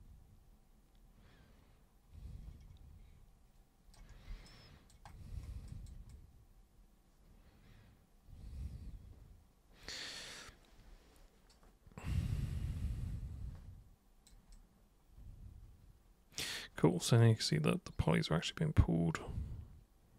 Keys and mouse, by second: 4.5 alt+super+click, 5.7 alt+super+click, 6.1-14.3 super+drag, 14.5-20.1 super+drag.